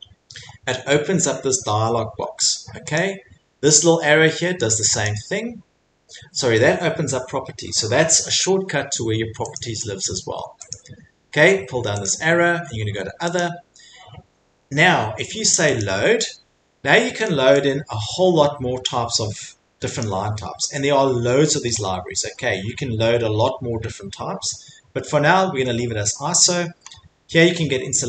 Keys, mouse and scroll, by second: 5.0 click, 10.2 click, 10.7 click, 12.0 click, 13.4 click, 20.0 click, 25.3 scroll, 26.0-27.1 scroll, 27.9-28.0 scroll.